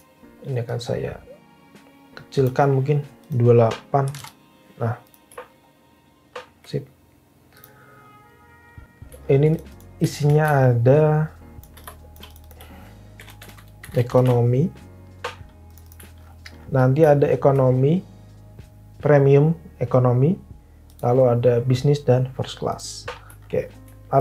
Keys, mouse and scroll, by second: 3.7-4.6 typing, 12.9-14.7 typing.